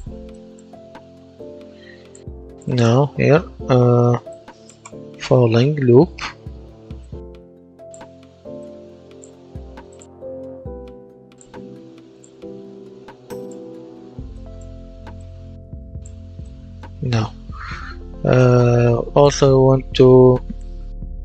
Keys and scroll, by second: 4.9-6.5 typing.